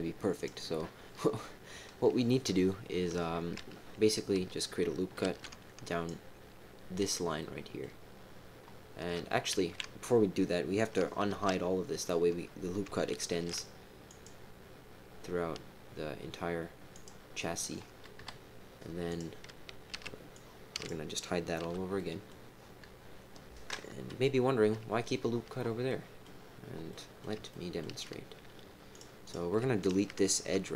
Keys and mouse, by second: 0.3 click, 5.2 ctrl+r, 7.3 middle click, 9.6 ctrl+z, 11.3 alt+h, 13.3 ctrl+r, 17.4 click, 18.1 KP_3, 19.1 click, 19.9 b, 21.6 h, 21.9 middle click, 24.0 KP_1, 25.8 middle click, 26.9 middle click, 27.5 shift+middle click, 28.9 click, 29.2 click.